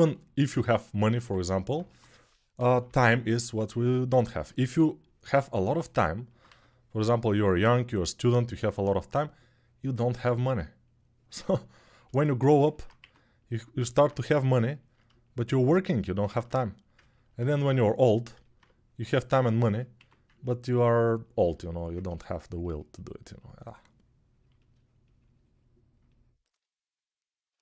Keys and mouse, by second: 0.6-12.1 alt+shift+drag, 1.6 1, 2.3 [, 2.5 [, 2.7 [, 6.2 2, 12.7 1, 16.9 ctrl+alt+click, 17.4-21.7 right drag, 17.4 2, 19.7 1, 21.7-27.6 shift+drag.